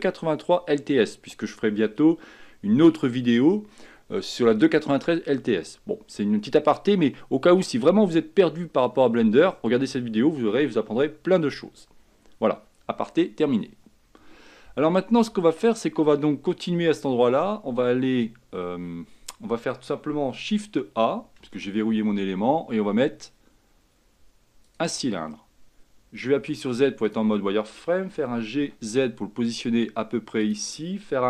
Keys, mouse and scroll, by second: 21.5 shift+a, 26.4 z, 28.3 g.